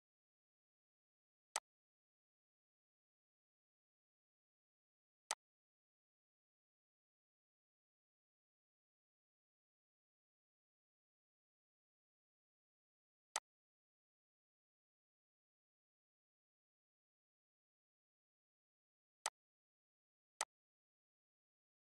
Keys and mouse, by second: 1.2 click, 3.3 ctrl+u, 5.0-15.2 drag, 16.7 r, 18.9 click.